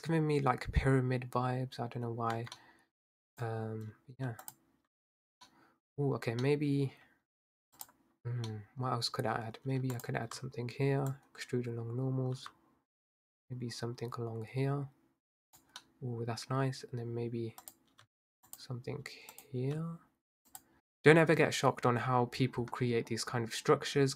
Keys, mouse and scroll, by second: 2.4 Tab, 2.6 middle click, 3.3 click, 4.5 alt+shift+click, 5.8 middle click, 6.2 scroll down 2, 6.4 middle click, 6.9-7.8 scroll up 1, 7.8 click, 8.5 middle click, 9.0-9.9 scroll up 1, 9.9 alt+shift+click, 11.1 click, 15.8-17.6 middle drag, 17.6 click, 18.5 alt+shift+click, 19.3 click, 20.5 alt+shift+click, 20.8-21.9 middle drag, 22.0 scroll up 5, 22.3-23.1 scroll down 2, 23.1 scroll up 2, 23.3-23.9 scroll down 4, 23.9-24.1 scroll up 3.